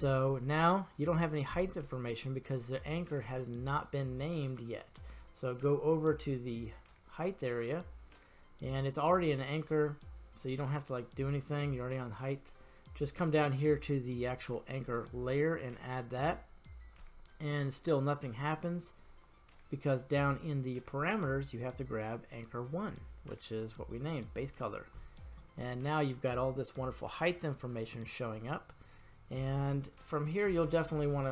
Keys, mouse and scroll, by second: 0.0-2.6 middle drag, 3.3-4.8 middle drag, 6.7 click, 14.9 click, 20.2-24.4 drag, 25.6-26.1 middle drag, 27.3-28.8 middle drag, 29.8-30.7 right drag, 30.7-31.3 drag.